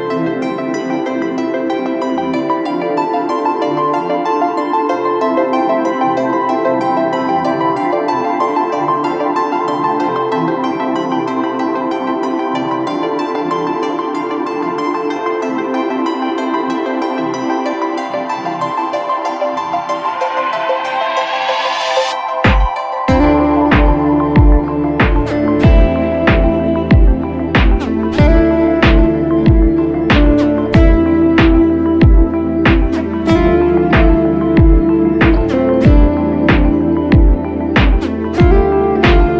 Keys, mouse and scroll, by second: 20.1-22.1 typing, 27.4-28.1 typing.